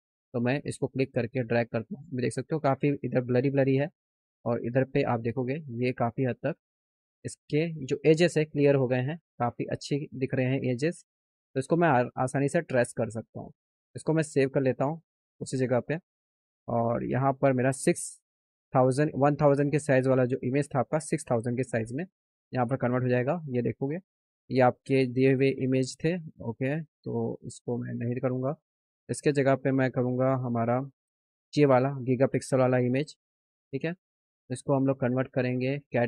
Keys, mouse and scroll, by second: 6.3 click, 10.7 click, 13.8 click, 14.8 click, 22.3 click, 23.0 click, 23.4 click, 24.0 click, 24.4 click, 27.9 click, 29.2 click, 30.8 click, 32.7 click, 34.2 click, 35.4 click.